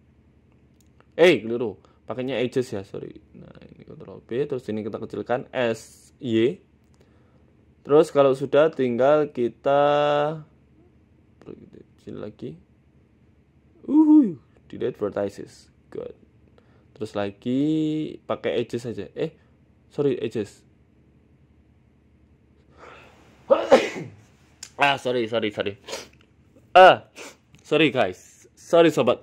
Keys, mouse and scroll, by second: 0.3 click, 0.9 click, 1.5 shift+click, 1.7 shift+click, 2.2 ctrl+b, 4.5 click, 5.1 s, 7.7 middle click, 8.2 middle click, 8.9 KP_7, 9.7 click, 10.6 g, 11.8 middle click, 12.2 middle click, 12.9 click, 13.3 right click, 13.5 middle click, 13.9 click, 14.8 Delete, 16.1 middle click, 19.3 click, 20.0 right click, 21.3 click, 21.6 middle click, 22.5 click, 23.1 right click, 23.5 Delete, 24.5 middle click, 25.1 middle click, 25.7 click.